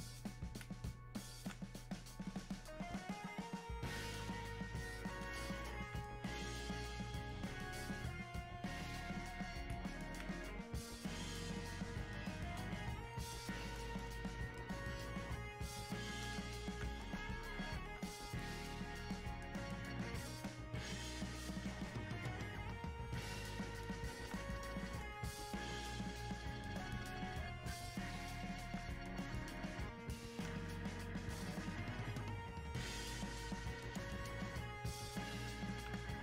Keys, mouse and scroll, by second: 12.3 click, 13.9 click, 17.0 click, 23.3 click.